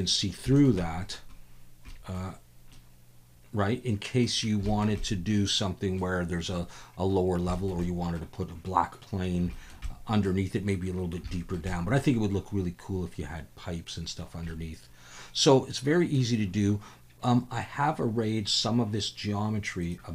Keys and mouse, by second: 0.6 shift+middle click, 0.8-1.1 middle drag, 1.9 middle click, 2.7-4.3 middle drag, 4.7 shift+middle click, 5.0-6.0 middle drag, 7.5 shift+middle click, 7.8-8.2 middle drag, 9.6 shift+middle click, 9.9-10.3 middle drag, 11.3 shift+middle drag, 11.7 middle drag, 14.5-16.1 middle drag, 19.8-20.1 drag.